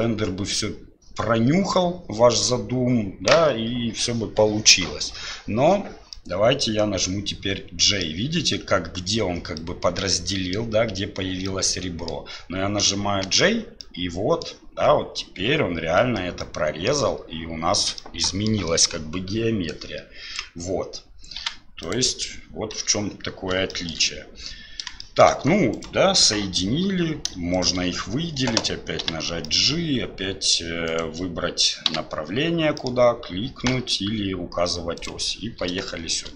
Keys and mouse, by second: 6.1-8.0 middle drag, 9.6 middle click, 10.3 middle click, 11.4 middle click, 13.8 middle click, 16.4 middle click, 18.0 middle click, 19.7 click, 21.4 x, 22.7 KP_7, 23.7 shift+click, 25.0 shift+click, 25.7-27.3 drag, 36.0 shift+middle click.